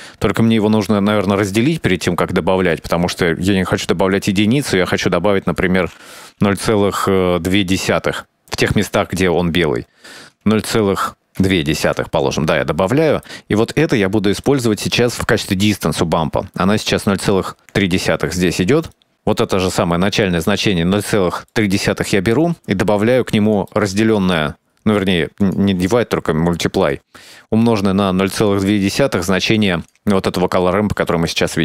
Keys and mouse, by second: 0.0-0.7 drag, 1.5 shift+d, 2.8-4.9 drag, 5.7-12.3 drag, 12.3 middle click, 13.1 middle click, 13.9 middle click, 14.6 click, 16.6 middle drag, 18.2 click, 18.7 middle click, 19.1-20.3 middle drag, 21.4 middle click, 23.1 click, 23.8 middle click, 25.6-27.2 drag, 28.0 click, 28.9 middle click, 29.8 click.